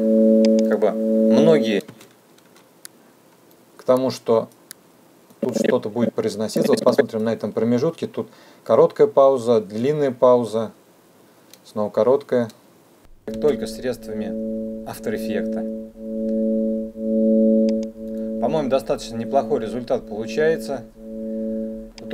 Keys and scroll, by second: 13.4 space.